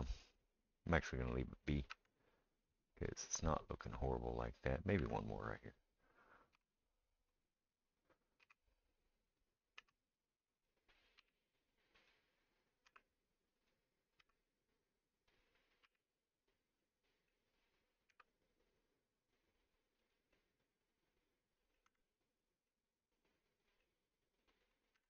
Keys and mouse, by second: 1.9 Tab, 5.0 Tab, 5.6 click, 5.7 middle click, 6.5 3, 6.6 click, 7.4-24.5 middle drag, 8.4 e, 9.8 s, 11.2 g, 12.9 e, 14.2 s, 15.8 g, 18.1 r, 21.9 Tab, 24.5 click, 24.6-25.0 middle drag, 24.9 Tab.